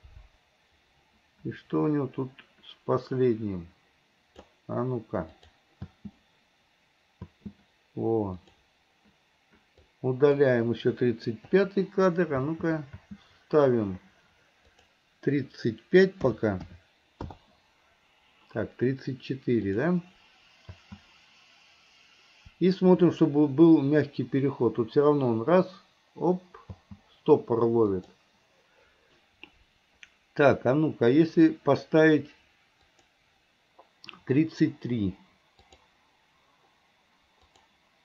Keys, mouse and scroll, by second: 5.4 click, 5.9 space, 8.5 click, 9.8-10.4 drag, 11.6 Delete, 14.7-17.4 drag, 19.7 click, 20.8 space, 26.8 space, 28.0 click, 32.9 click, 35.8 click, 37.6 click.